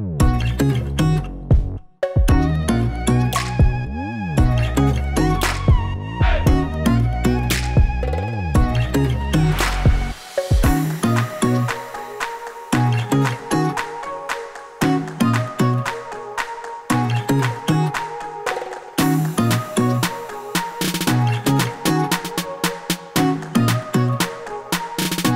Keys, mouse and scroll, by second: 0.3 click, 1.2-1.7 scroll down 4, 1.5 middle click, 2.5 s, 4.7 click, 5.1 click, 5.6 shift+a, 9.5 click, 10.8 s, 12.4-12.8 scroll down 2, 13.3-15.9 click, 16.4 click, 17.6 KP_0, 19.8 shift+a, 23.5 middle click, 24.5 click.